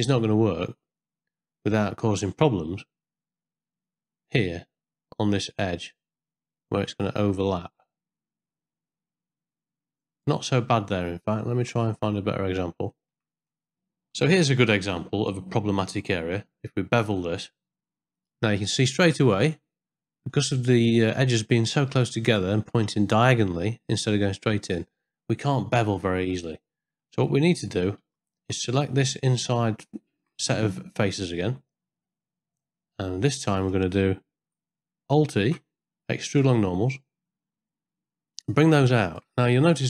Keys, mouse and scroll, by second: 10.8 middle click, 11.3 ctrl+middle click, 12.1 middle click, 12.9 shift+middle click, 13.5 middle click, 13.9 ctrl+z, 14.1 ctrl+middle click, 15.0 ctrl+middle click, 15.7 middle click, 17.1 ctrl+b, 26.1 middle click, 28.0 ctrl+z, 28.9 middle click, 29.7 shift+middle click, 32.0-33.5 middle drag, 35.4 alt+e, 38.0-39.0 shift+middle drag, 39.6 middle click.